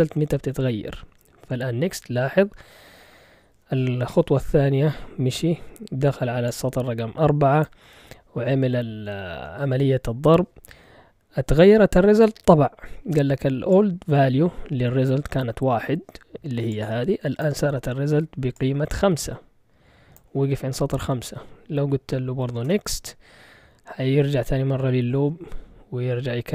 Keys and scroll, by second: 1.1 Return, 22.6 Return.